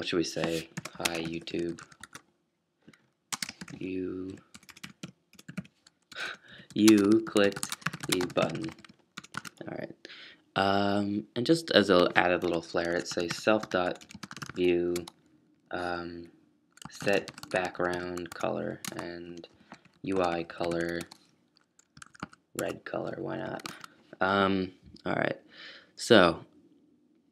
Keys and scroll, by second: 0.0-9.8 typing, 12.8-15.0 typing, 16.5-24.2 typing, 25.9-26.6 typing.